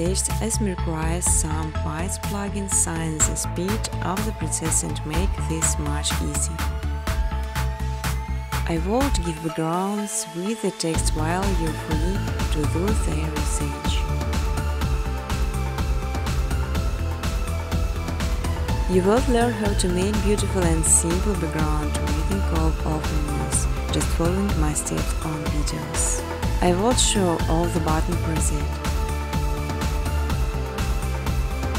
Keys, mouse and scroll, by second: 1.1 click, 2.4 click, 3.7 click, 4.1 click, 4.3 click, 4.6 click, 4.9 click, 5.3 click, 5.6 click, 5.8 click, 6.2 click, 6.8 click, 7.6 scroll, 8.3 click, 9.1 click, 9.8 click, 11.1 click, 12.7 right click, 14.9 click, 15.6-16.7 typing, 17.3 Return, 19.0 click, 25.5 click, 26.6 click, 27.4 click, 27.9 click, 30.7 click, 31.3-31.7 typing.